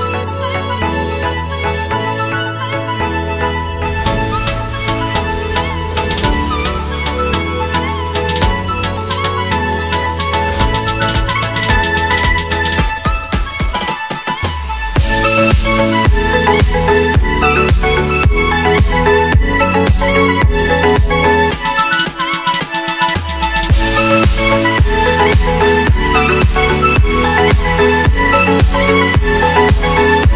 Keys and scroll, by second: 10.9 Escape, 11.4 F3, 13.0 shift+F2, 13.6 Escape, 16.6 Delete, 17.7 ctrl+g, 20.6 shift+Page_Up, 24.3 c.